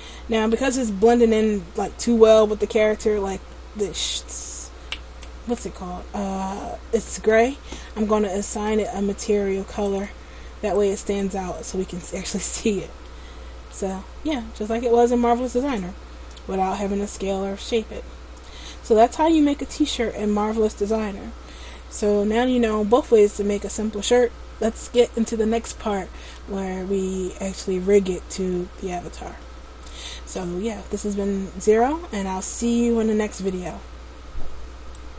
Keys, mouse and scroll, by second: 0.8 shift+middle click, 2.6 right click, 8.7 click, 10.0 click, 12.5 click, 13.2 middle click, 17.3-18.0 scroll down 4, 18.0-18.4 scroll up 1, 20.0-21.0 scroll up 1.